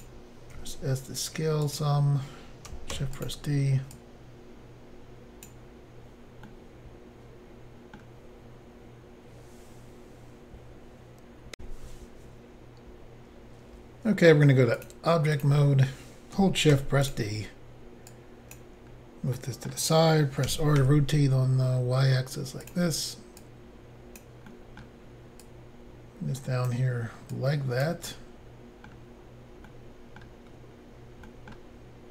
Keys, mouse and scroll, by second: 0.6 s, 1.7 click, 1.8 click, 3.0 d, 3.3 click, 4.0 click, 6.5 middle click, 11.6 Insert, 14.8 click, 15.3 click, 16.7 d, 17.0 click, 18.8-19.3 scroll down 1, 19.3 middle click, 19.3 scroll down 1, 20.5-20.8 typing, 22.6 click, 22.7 click, 23.4 click, 24.5 middle click, 25.4 click, 27.3 click, 28.1 middle click, 29.7 middle click, 31.3 middle click.